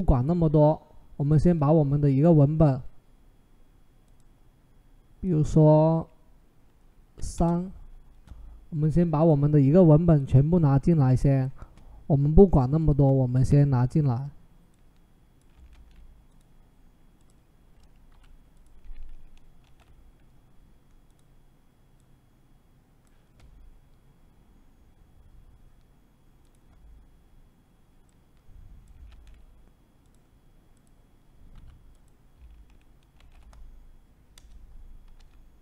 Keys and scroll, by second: 7.0 3, 7.1 Return, 15.6 ctrl+c, 17.9 t, 19.4 ctrl+v, 28.9 ctrl+c, 31.3 t, 32.9 ctrl+v, 34.1 Return, 34.9 v.